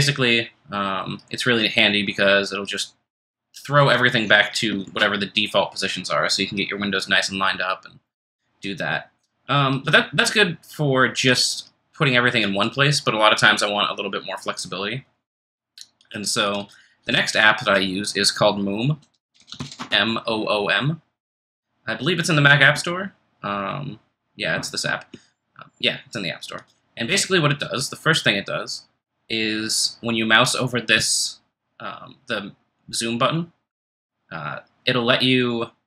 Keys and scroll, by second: 4.8 ctrl+shift+Return, 18.7-20.0 typing.